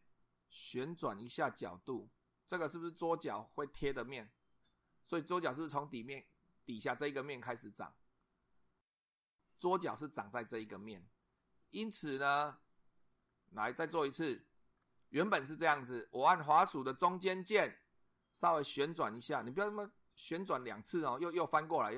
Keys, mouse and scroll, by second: 2.8-3.1 drag, 13.2 click, 14.8 click, 17.2-21.9 middle drag.